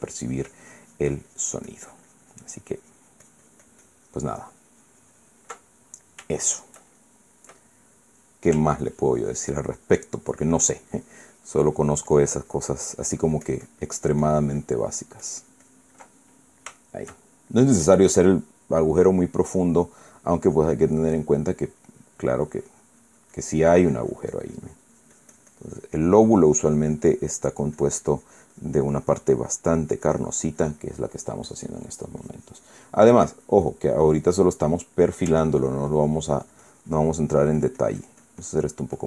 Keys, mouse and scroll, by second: 6.4 ctrl+middle click, 7.1 shift+middle click, 7.7 shift+middle click, 8.3 middle click, 9.5-16.8 ctrl+drag, 16.9-18.4 ctrl+middle drag, 20.3-24.5 drag, 24.6-33.6 drag, 33.8 click, 34.8 click, 35.3 middle click, 36.3-39.0 ctrl+drag.